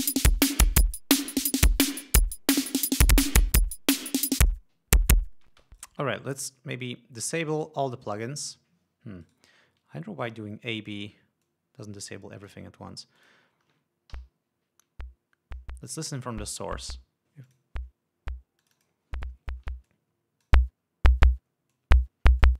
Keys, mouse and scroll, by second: 2.5 click, 4.9 click, 6.0 space, 6.2 right click, 8.0 click, 9.7 right click, 10.7 click, 11.9-13.2 drag, 13.7 click, 13.9-14.6 scroll up 1, 14.6-15.1 scroll up 1, 14.6 l, 17.9 click, 19.1-19.7 drag, 20.3 click, 22.2 click.